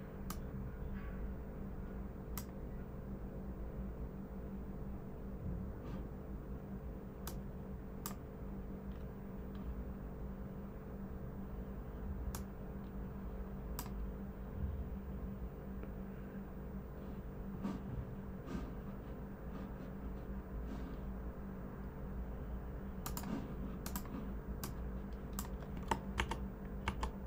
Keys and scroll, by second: 26.1 super+-, 26.8 super+-.